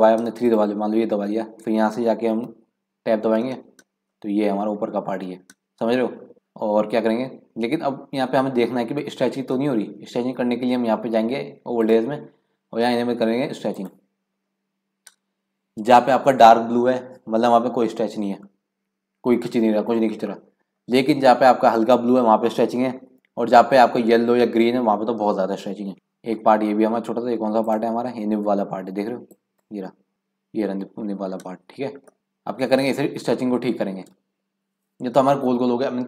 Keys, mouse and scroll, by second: 0.3 3, 0.4 click, 2.4 KP_Decimal, 3.3-4.1 scroll down 9, 4.1 scroll up 2, 4.2-6.0 middle drag, 6.0-6.3 scroll down 7, 6.3 middle click, 6.9-7.3 scroll down 1, 9.6-11.9 middle drag, 11.9-14.8 drag, 20.3-22.4 scroll up 4, 22.4 scroll up 2, 22.9 scroll down 4, 25.9-27.6 shift+middle drag, 27.6 click, 29.3 click, 31.3-32.1 scroll down 7, 32.1 shift+middle click, 32.7 scroll up 1, 32.9-36.0 shift+middle drag.